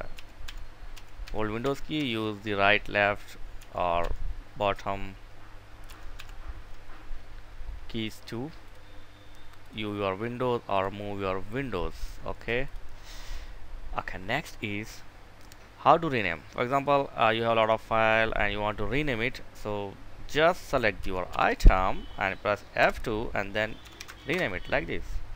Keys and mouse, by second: 3.0 Down, 3.4 Up, 5.3 Down, 8.0 click, 14.8-15.8 right drag, 16.0 click, 20.4 Down, 20.6 Up, 20.9 Right, 21.0 Right, 22.2 F2, 23.0-23.9 typing, 24.9 F2, 25.0-25.3 typing.